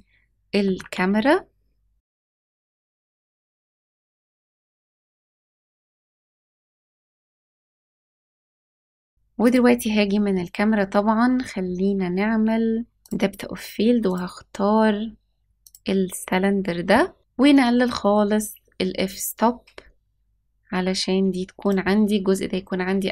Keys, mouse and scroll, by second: 0.5 g, 2.2 scroll down 3, 2.5-7.7 typing, 3.2-3.7 scroll up 3, 9.3 click, 12.9 click, 14.0 click, 17.7-21.6 drag.